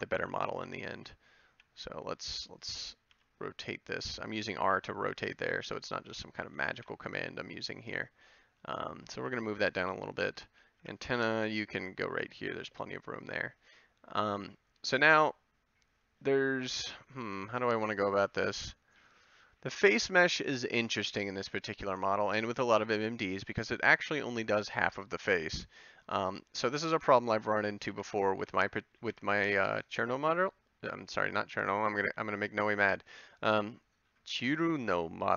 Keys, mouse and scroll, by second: 0.8 ctrl+l, 1.5 g, 3.1 r, 4.6 a, 5.6 c, 6.8 ctrl+l, 7.9 g, 9.3 a, 10.8 b, 11.3 g, 12.5 a, 24.4-26.0 middle drag, 27.0 ctrl+l, 27.9 c, 29.1 ctrl+l, 32.4 g.